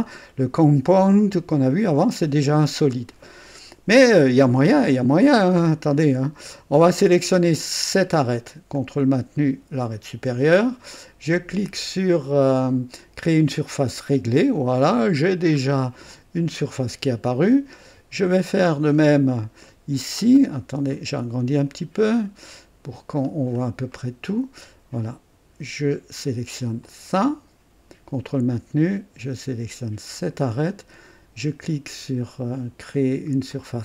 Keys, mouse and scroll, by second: 7.0 click, 9.8 ctrl+click, 13.6 click, 14.7 click, 15.5 scroll up 2, 16.1-17.5 drag, 19.6 right click, 20.2-20.6 scroll down 1, 20.9 right click, 21.7-22.1 scroll down 1, 22.5 right click, 23.2-23.5 scroll down 1, 23.9 right click, 26.8 click, 30.1 ctrl+click, 33.5 click.